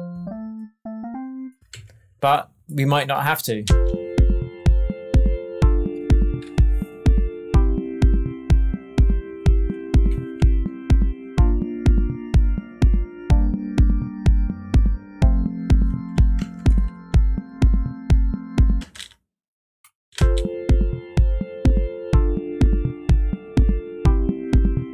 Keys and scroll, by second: 1.6 alt+Left, 2.5 Left, 3.6 space, 16.3 shift+Tab, 18.7 space, 20.1 space.